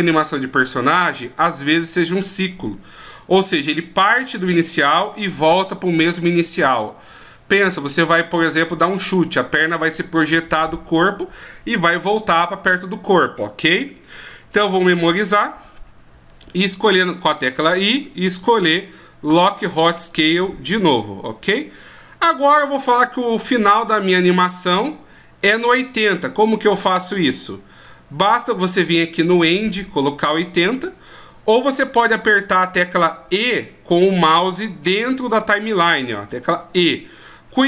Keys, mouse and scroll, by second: 21.8 click, 25.7 click.